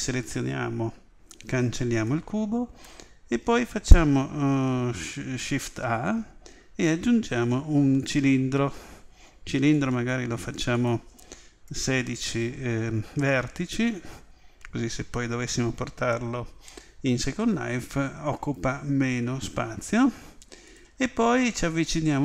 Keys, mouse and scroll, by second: 1.1 Delete, 9.7-12.6 drag, 21.2-22.2 middle drag.